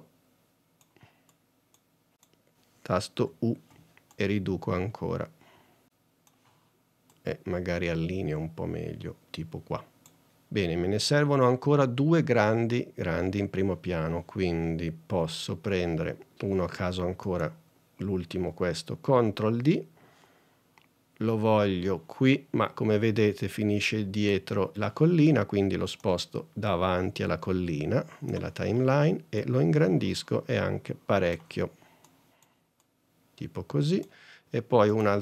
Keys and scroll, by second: 1.6 super+z, 3.3 u, 19.2 super+d, 32.5 super+Tab.